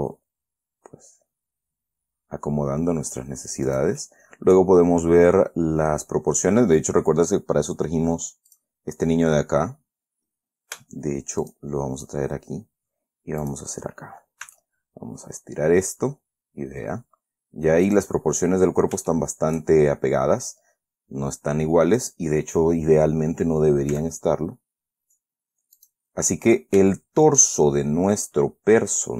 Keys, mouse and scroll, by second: 4.0 click, 4.3-7.2 middle drag, 8.8 click, 9.6 scroll down 1, 9.7-10.0 scroll up 1, 10.0-10.5 scroll down 1, 10.5 ctrl+alt+s, 11.8 shift+click, 13.8 click, 14.8 s, 18.2 click, 18.7-19.0 scroll up 2, 19.4 shift+middle click, 22.2 scroll down 1, 24.3 s, 26.1 click, 26.6-27.1 scroll down 1, 27.3 shift+middle click.